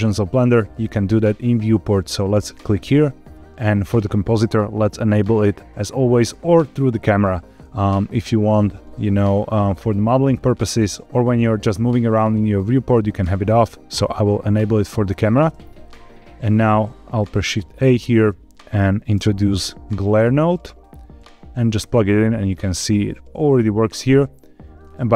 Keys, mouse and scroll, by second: 2.2-15.1 drag, 15.8 click, 16.0 click, 16.7 shift+a, 24.7-25.1 middle drag.